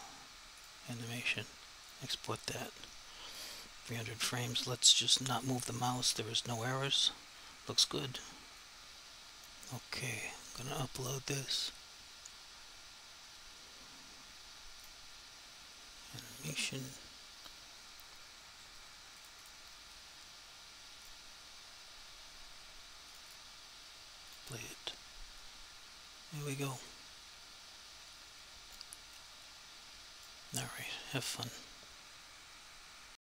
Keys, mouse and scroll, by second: 0.6 click, 8.6 click, 11.7 click, 14.9 click, 19.3 click, 23.3 double click, 24.3 click, 25.5 alt+click, 27.0 click, 29.3 alt+click, 33.2 alt+click.